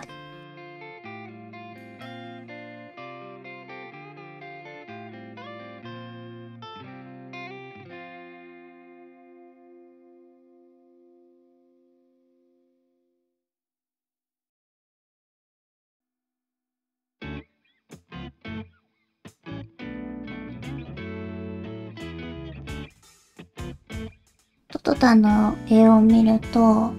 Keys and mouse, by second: 0.2-5.4 typing, 1.5 alt+a, 1.8 middle click, 2.1 middle click, 2.6 middle click, 3.1 middle click, 3.4 middle click, 4.1 middle click, 5.1 middle click, 5.7 middle click, 6.2 middle click, 6.4 g, 7.0 middle click, 7.4 middle click, 7.5 g, 7.9 middle click, 8.0 middle click, 8.2 click, 8.3 middle click, 8.4 click, 8.7 g, 9.9 KP_1, 10.3 click, 12.5 click, 12.7 shift+middle click, 13.3 g, 13.9 click, 14.0 g, 15.9 click, 16.0 g, 16.8 Tab, 17.5-18.9 drag, 19.2 Tab, 19.6 shift+middle click, 19.8 alt+a, 20.1 l, 20.3 g, 20.6 r, 20.8 g, 21.2 Tab, 23.1 Tab, 23.5 alt+a.